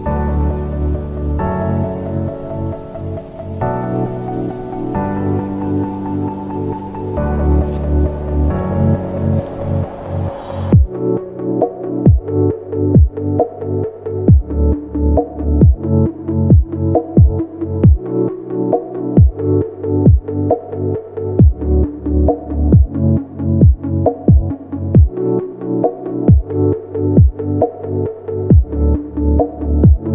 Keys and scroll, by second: 5.1 space, 10.0 BackSpace, 12.5 space, 19.2 BackSpace, 23.3 ctrl+g, 24.9 space.